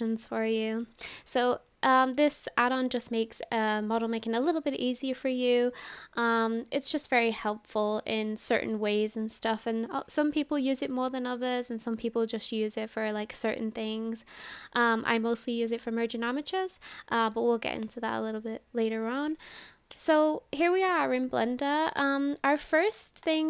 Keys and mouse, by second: 23.2 click.